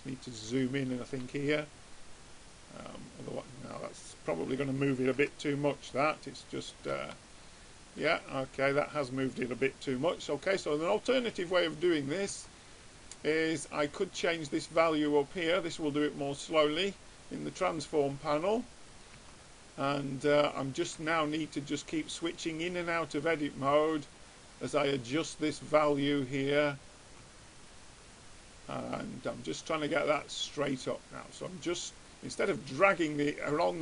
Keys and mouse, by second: 2.6-3.9 right drag, 3.9 click, 4.5-5.6 middle drag, 5.6 Tab, 7.1 middle click, 7.9 middle click, 13.5 Tab, 14.1-18.9 drag, 19.7 Tab, 21.2 Tab, 27.6 Tab, 30.3 Tab.